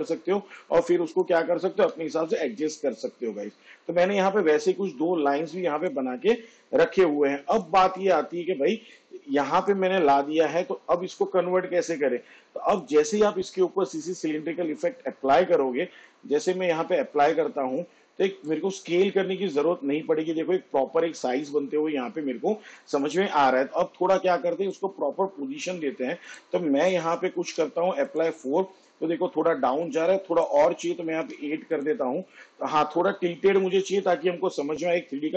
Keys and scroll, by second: 1.8 Delete, 27.7 4, 31.3 8.